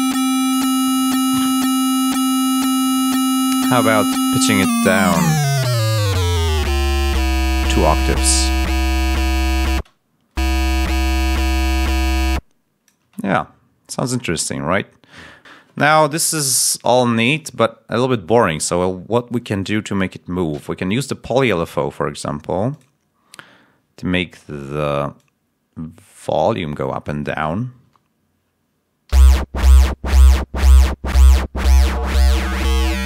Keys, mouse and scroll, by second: 4.4 click, 8.6 click, 9.6 space, 10.3 space, 12.1 click, 12.9 space, 22.6 click, 27.7 l, 29.0 l.